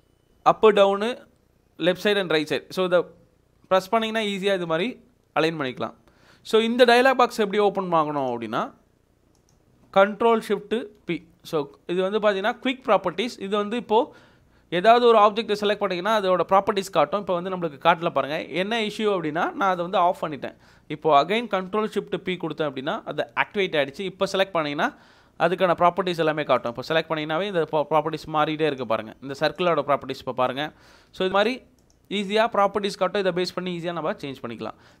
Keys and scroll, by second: 0.5 ctrl+Up, 0.9 ctrl+Left, 1.5 ctrl+Right, 20.7 Escape, 26.1 Escape, 28.2 Escape, 29.2 Escape, 30.8 Escape, 31.1 Escape, 34.1 Escape.